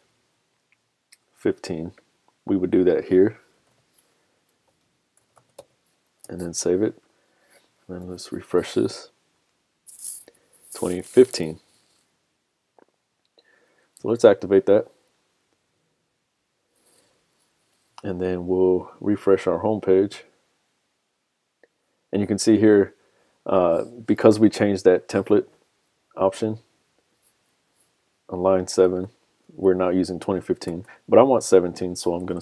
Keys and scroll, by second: 6.3 super+s, 6.8 super+Tab, 9.0 super+r, 24.5 super+Tab, 29.4 super+Tab, 31.9 super+Tab.